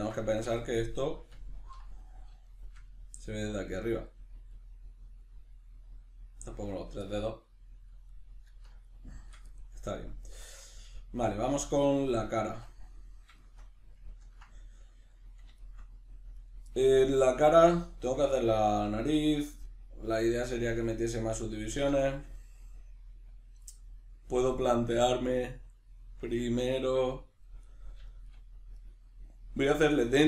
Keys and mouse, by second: 0.2 a, 0.7 middle click, 12.2 Tab, 13.4-28.8 shift+middle drag, 16.4 right click, 28.8 right click.